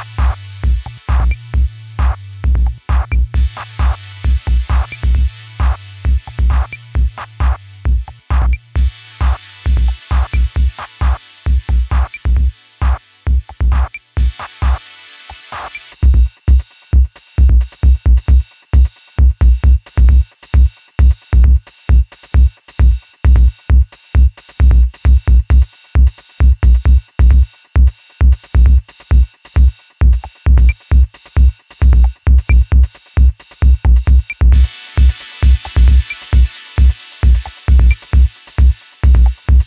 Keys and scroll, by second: 18.9 ctrl+KP_Add, 19.1 ctrl+KP_Add.